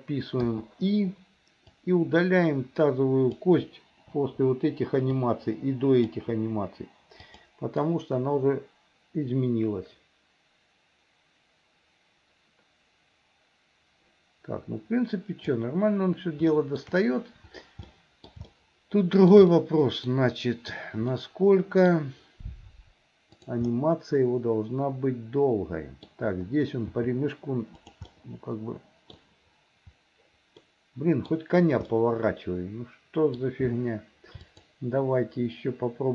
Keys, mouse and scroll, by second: 0.5 i, 1.7-3.4 drag, 4.2 Delete, 5.1-6.1 drag, 6.4 Delete, 7.3 click, 7.9-15.6 drag, 16.6 shift+middle click, 17.9 middle click, 18.5 shift+middle click, 19.5 middle click, 21.2 middle click, 23.3 click, 23.7-26.1 middle drag, 27.0 g, 28.2-29.2 middle drag, 30.7 middle click, 32.0-33.4 middle drag, 34.5 shift+click.